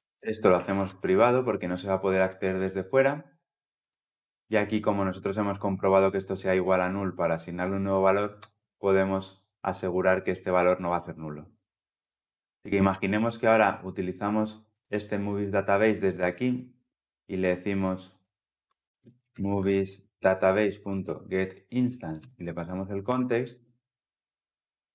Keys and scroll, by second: 1.0 Return, 11.8 ctrl+alt+l, 12.0 ctrl+alt+o, 20.4 Return.